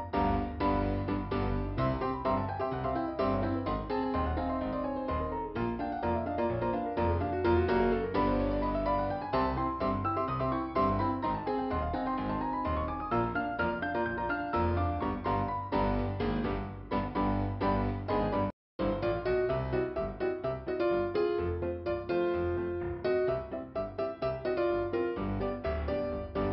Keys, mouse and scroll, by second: 1.9 click, 2.5 middle click, 3.8 click, 6.2 click, 10.0 click, 12.0 click, 13.6 click, 21.4 click, 22.4 middle click, 24.2 click, 24.8 click.